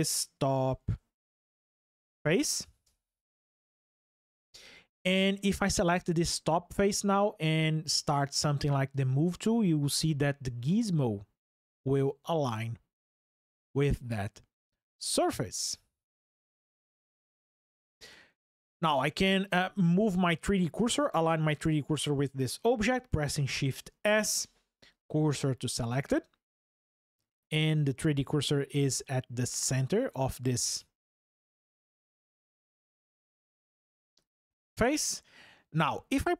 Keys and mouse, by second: 17.0-21.4 middle drag, 23.7 shift+s, 34.2 click.